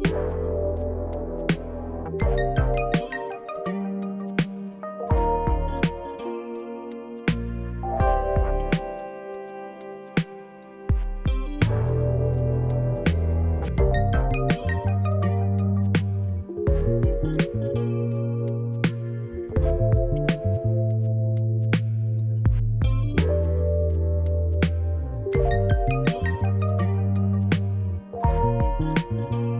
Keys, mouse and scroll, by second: 0.2 scroll down 1, 0.4-3.4 shift+middle drag, 0.6-3.3 scroll up 1, 4.3 click, 5.5-6.6 middle drag, 5.5 scroll up 1, 6.6 alt+shift+click, 9.5-10.0 scroll down 1, 11.3 shift+middle click, 11.8 scroll up 1, 12.2 shift+middle click, 12.4-12.7 scroll up 1, 13.7 scroll down 1, 13.9 shift+middle click, 15.1-16.2 drag, 16.2 shift+middle click, 16.2 scroll down 1, 16.4-18.0 scroll up 2, 18.0-19.3 scroll up 1, 19.3-29.5 scroll up 1, 29.5 click.